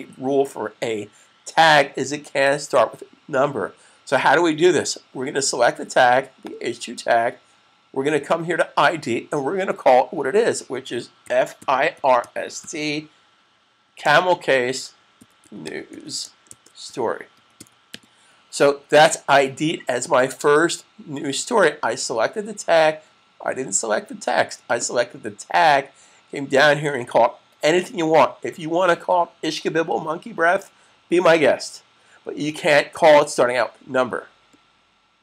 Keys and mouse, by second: 6.3 click, 11.0-11.5 typing, 15.9-18.1 typing.